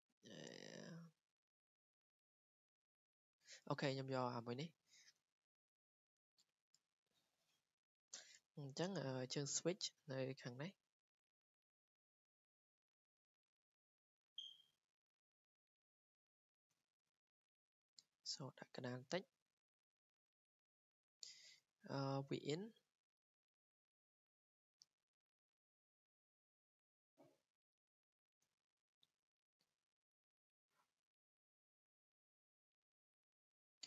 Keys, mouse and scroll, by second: 0.3 click, 1.6 click, 6.9 click, 7.0 click, 8.8-9.3 scroll, 10.0 scroll, 11.1 scroll, 12.9 click, 13.2 Escape, 13.4 Escape, 13.7 scroll, 14.6 w, 15.2 click, 16.4 click, 16.6 Escape, 16.9 scroll, 18.5 click, 18.8 Escape, 20.1-20.8 scroll, 20.8-21.2 scroll down 3, 21.4-21.7 scroll down 3, 22.8 scroll down 1, 23.5 scroll, 28.0 click, 28.4 Escape, 31.2 click, 32.7 click, 32.8 Escape, 33.6 click.